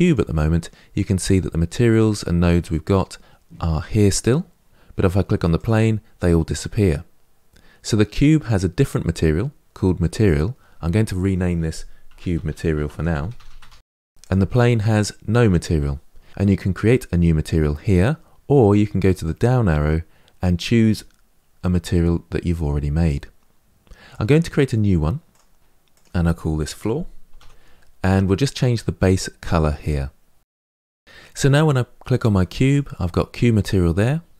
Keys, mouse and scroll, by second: 5.4 click, 7.9 click, 14.0 click, 25.2 click, 27.5 o, 30.5 click, 32.5 click.